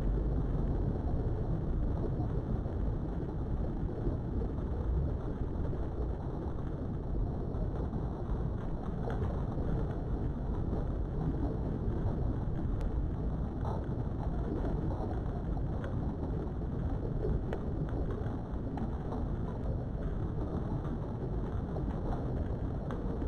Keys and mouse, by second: 1.8 shift+middle click, 3.2 shift+middle click, 4.9 shift+middle click, 6.3 click, 8.0 middle click, 9.4 middle click, 10.6 click, 11.7 middle click, 12.6 KP_3, 13.8 g, 14.3 z, 15.8 click, 16.5 click, 18.2 g, 19.5 click, 20.3 click, 20.5 g, 21.3 click.